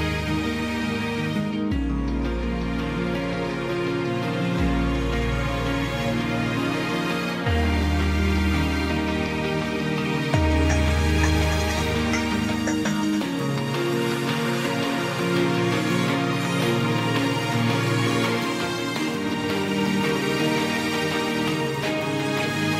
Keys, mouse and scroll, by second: 21.1 ctrl+d.